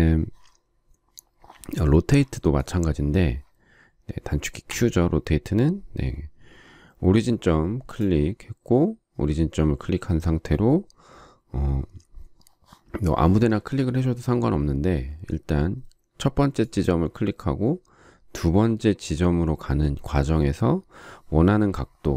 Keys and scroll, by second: 4.7 q.